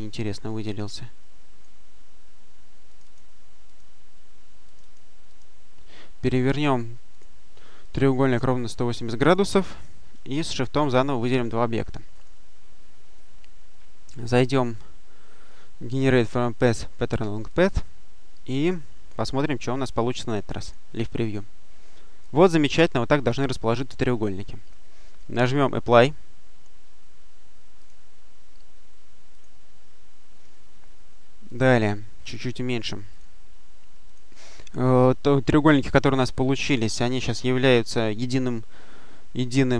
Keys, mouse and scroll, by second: 0.4-2.0 drag, 2.8-3.5 drag, 3.5 click, 4.5 click, 7.0 click, 7.7 click, 8.6 click, 10.2 shift+click, 12.0 click, 17.3 click, 18.3-19.4 drag, 20.5 click, 22.1-25.0 drag, 27.7 click, 29.2 click, 29.6-30.4 scroll down 1, 30.4-31.3 scroll down 1, 31.3 click, 32.1 click, 33.0 click, 33.9 click, 34.3-34.8 scroll down 2, 35.5 click.